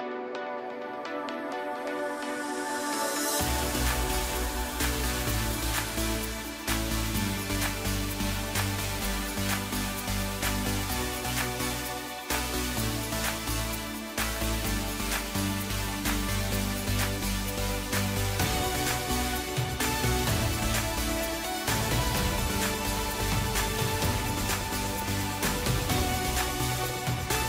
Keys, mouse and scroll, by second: 0.5 Tab, 0.8-1.1 scroll down 2, 1.1-4.3 middle drag, 4.6 KP_Divide, 5.5 KP_1, 6.5 click, 6.9 scroll up 1, 7.2 scroll down 1, 7.4 middle click, 7.8-8.1 scroll up 2, 8.1 Tab, 9.1 KP_1, 9.7-10.0 scroll up 3, 10.3 click, 11.7 shift+click, 12.0 shift+click, 12.9 shift+click, 13.6 middle click, 14.5 shift+click, 14.8 shift+click, 15.3 shift+click, 15.6 shift+click, 16.1 middle click, 16.7 shift+click, 17.1 shift+click, 17.4 shift+click, 17.8 shift+click, 18.2 shift+click, 19.5 KP_Divide, 20.8-21.2 scroll down 1, 21.2 middle click, 22.0 shift+click, 22.4 shift+click, 22.7 shift+click, 23.3 shift+click, 23.6 shift+click, 24.0-25.3 middle drag, 25.3 shift+click, 26.2-27.4 middle drag.